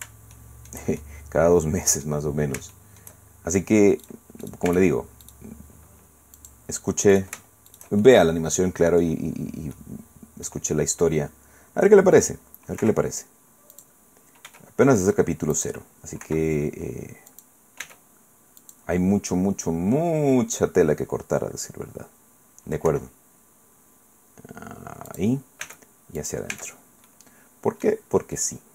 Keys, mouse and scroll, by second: 0.3 shift+middle click, 1.0-2.2 shift+middle drag, 2.2 click, 2.7 shift+click, 3.2 shift+middle click, 4.0 click, 4.4 click, 4.7 Tab, 5.2 click, 5.5 middle click, 6.4 middle click, 7.1 shift+middle click, 7.7-9.2 shift+middle drag, 9.2-9.7 scroll down 2, 9.7 middle click, 12.8 i, 13.7 click, 14.5 e, 15.5 click, 16.2 i, 17.3 click, 17.8 e, 18.6 click, 22.9 i, 25.1 click, 25.6 e, 26.2 click, 26.5 Tab, 27.1 middle click, 27.1 scroll down 1, 28.3 middle click.